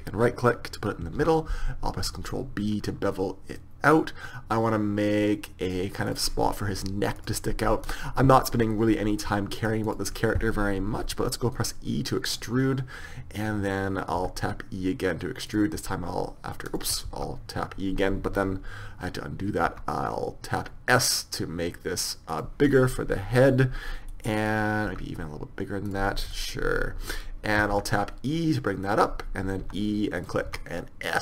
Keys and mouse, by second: 1.2 ctrl+b, 7.2-9.1 drag, 9.1 right click, 9.9-11.8 drag, 11.0 e, 14.2 e, 15.8 e, 17.1 ctrl+z, 19.7 s, 22.7-24.2 middle drag, 24.9 s, 27.8 e, 29.7 e, 30.5 s.